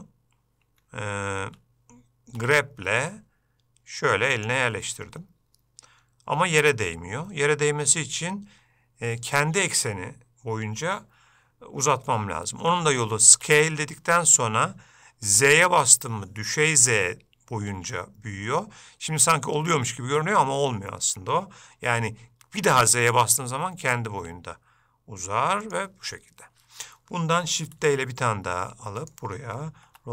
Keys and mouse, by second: 1.6 Escape, 2.6 g, 13.5 g, 27.9 shift+d.